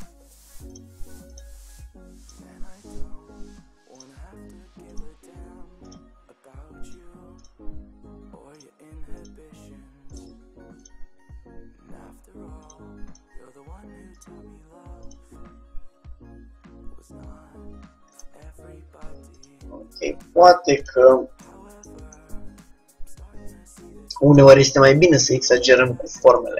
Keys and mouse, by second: 3.3 g, 5.1-9.1 drag, 6.2 g, 7.6 g, 9.3-12.5 drag, 9.6 g, 11.0 g, 13.2-14.8 drag, 13.2 g, 15.1-16.9 drag, 15.3 g, 19.4-21.1 drag, 19.7 g, 21.3-24.4 middle drag, 24.4-26.3 drag, 24.5 g.